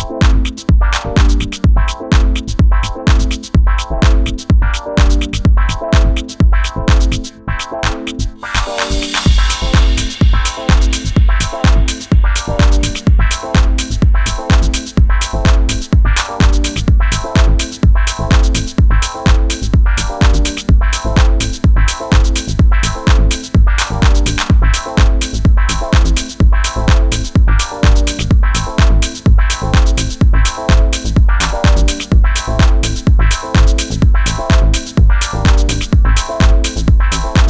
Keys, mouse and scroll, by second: 2.7-4.9 drag, 5.2-6.2 middle drag, 6.2-8.3 drag, 8.3 z, 14.7 middle click, 15.3 middle click, 22.5 shift+d, 24.8 p, 27.2 Tab.